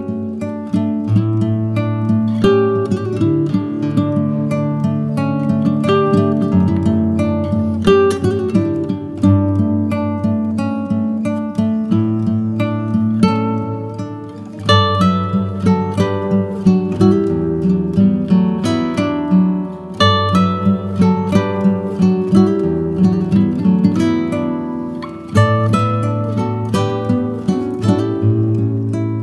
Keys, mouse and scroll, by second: 1.3 middle click, 1.9-4.4 middle drag, 5.1 middle click, 6.7-7.8 middle drag, 8.4 click, 9.1 middle click, 9.4 click, 10.1 click, 10.3 middle click, 12.1 middle click, 12.7 click, 14.2 click, 14.4-15.6 middle drag, 15.9-17.4 middle drag, 17.4 click, 18.3 click, 18.4-19.7 middle drag, 19.7 click, 20.4 middle click, 21.3 click, 23.1 scroll up 2, 26.2 middle click, 26.8 click, 26.9 middle click.